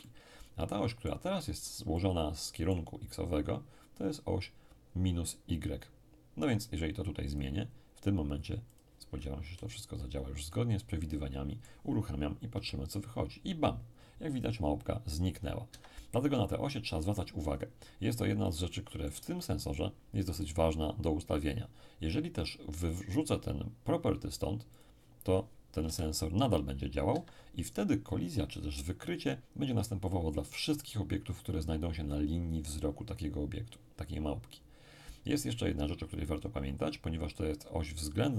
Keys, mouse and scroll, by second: 0.0-3.7 middle drag, 7.3 click, 8.7 click, 9.1-10.5 scroll down 1, 9.4 z, 10.5-12.6 middle drag, 12.5 p, 15.7 Escape, 17.5-17.9 scroll up 2, 17.9-18.5 scroll down 2, 18.5 shift+scroll down 1, 18.7-20.0 shift+middle drag, 24.7 click, 25.8 p, 27.1 Escape.